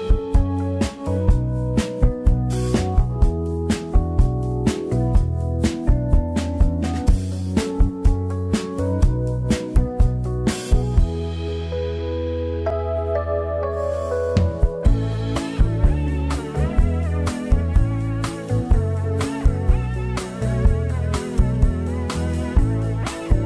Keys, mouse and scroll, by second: 2.2 Tab, 2.3 Tab, 2.9 scroll down 6, 3.6 ctrl+l, 4.6 shift+h, 4.8-5.2 scroll up 4, 5.2 click, 5.8 c, 7.2 Delete, 8.6 alt+h, 9.1 click, 9.9 v, 11.2 c, 12.4 Delete, 13.2 1, 13.7 click, 14.3 scroll up 3, 14.9 n, 15.5 n, 15.7 m, 17.0 shift+middle click, 17.2-17.6 scroll up 3, 17.6 1, 17.8 middle click, 18.2 scroll down 1, 18.4 z, 18.7 middle click, 18.9-19.5 scroll up 2, 19.5 middle click, 19.8 z, 20.3 click, 20.9 click, 21.7 scroll down 6, 21.8 scroll up 1, 21.9 middle click, 22.3 scroll down 2, 22.4 middle click, 22.6 scroll up 1, 22.7 Tab, 22.8 scroll down 2, 23.0-23.4 middle drag, 23.4 scroll down 1.